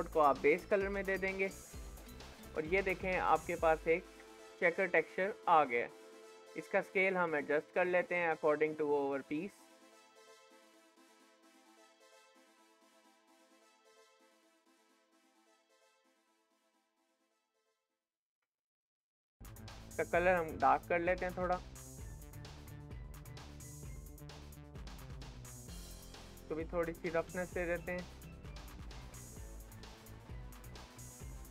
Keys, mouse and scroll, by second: 1.9-2.4 scroll up 5, 2.4-3.4 scroll down 11, 3.4-4.4 middle drag, 4.4-5.0 scroll up 5, 5.0-6.0 middle drag, 6.0-6.9 scroll up 3, 6.9-9.9 drag, 12.8 middle click, 13.7-14.3 scroll up 5, 14.3-16.2 middle drag, 16.2-17.0 scroll down 1, 17.0-18.0 shift+middle drag, 18.0-18.5 scroll up 1, 18.5 shift+middle click, 19.4-22.3 drag, 23.3 middle click, 24.3-24.6 scroll down 2, 24.4-26.5 shift+middle drag, 26.5-30.9 drag, 30.9 middle click.